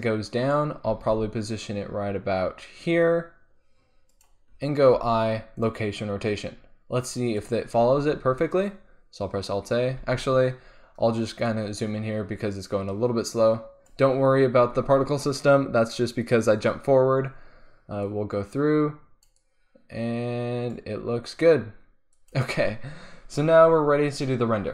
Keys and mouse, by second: 0.9 g, 4.2 click, 4.9 i, 5.8-7.2 drag, 7.3-9.2 drag, 8.0 alt+a, 10.2 alt+a, 11.5-13.8 drag, 18.1-22.0 drag, 22.1-24.0 drag.